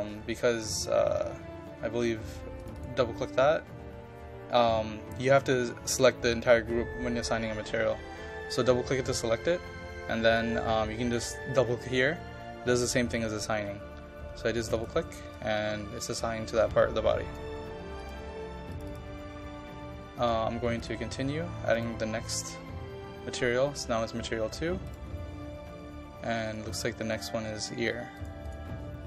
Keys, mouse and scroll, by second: 0.1-0.9 scroll up 1, 2.6 click, 14.8-17.9 drag.